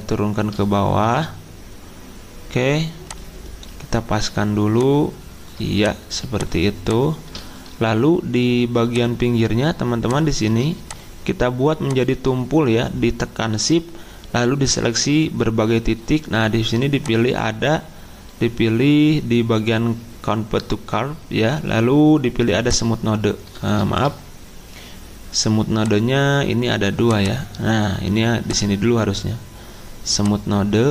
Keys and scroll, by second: 23.8 ctrl+z.